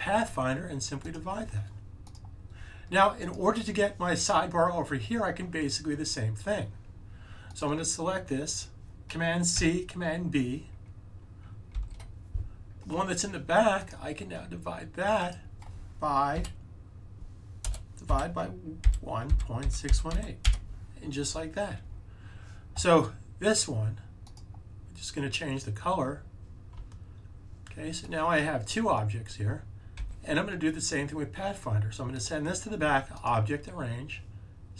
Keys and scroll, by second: 9.4 super+c, 11.7 b, 16.2 *, 18.0-20.4 typing, 29.9 super+z.